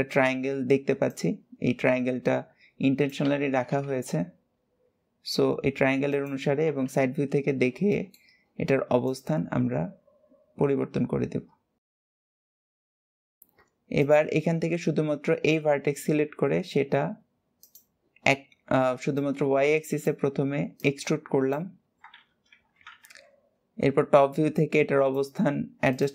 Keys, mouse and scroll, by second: 7.7-8.8 shift+middle drag, 8.8 click, 12.6 click, 12.8 middle drag, 13.3-13.8 scroll down 1, 13.8 click, 18.9 click, 20.5 click, 23.4-24.3 scroll up 2, 24.3 click, 25.7 click.